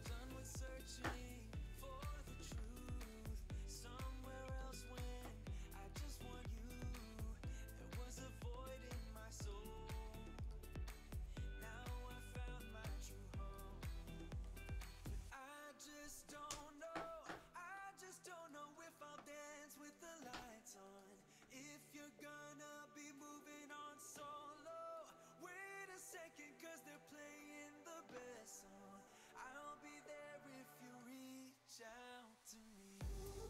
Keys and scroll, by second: 0.1 t, 3.5 super+v, 11.7 BackSpace, 14.6-16.8 typing, 19.8 space, 20.2 space, 29.7 alt+BackSpace, 32.9 alt+BackSpace.